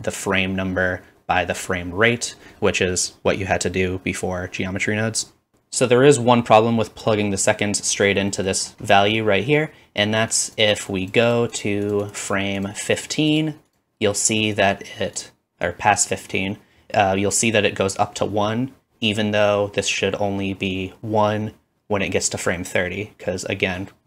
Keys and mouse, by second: 5.5 Left.